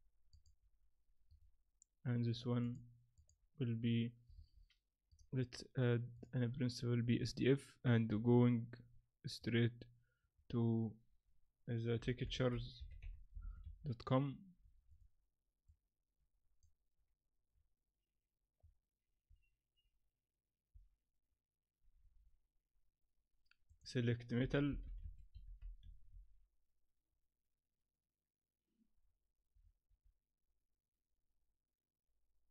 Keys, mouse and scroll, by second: 0.4 click, 1.3 right click, 2.6 click, 3.1 click, 5.1 click.